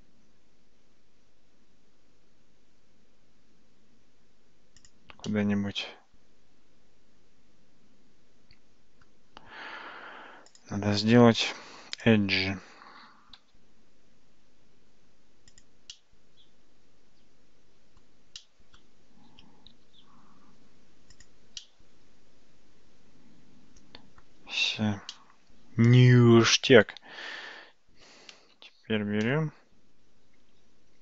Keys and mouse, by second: 5.3-9.1 middle drag, 10.7-12.4 drag, 15.0 g, 16.0-18.0 middle drag, 18.4 middle click, 19.8 g, 21.6-24.2 middle drag, 25.2-26.5 middle drag, 28.1 alt+z, 29.3-31.0 middle drag.